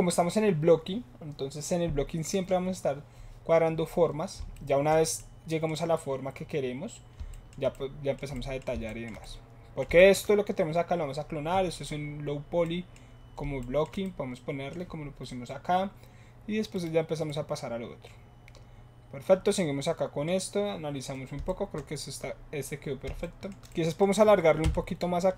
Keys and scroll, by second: 24.6 Tab.